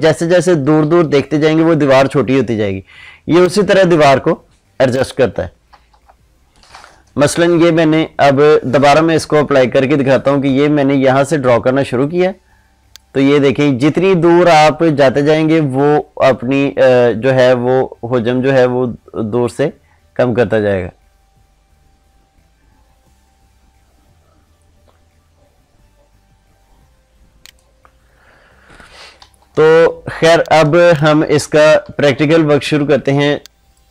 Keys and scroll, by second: 5.7 ctrl+z, 29.3 ctrl+z, 32.7 ctrl+space.